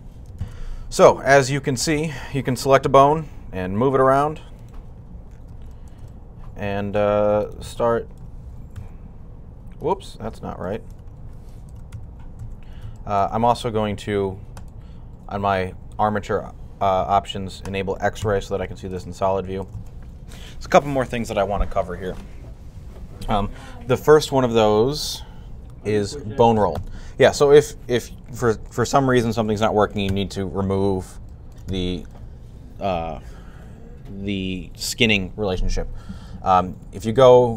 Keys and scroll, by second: 5.3 r, 11.6-12.8 typing, 18.1 z.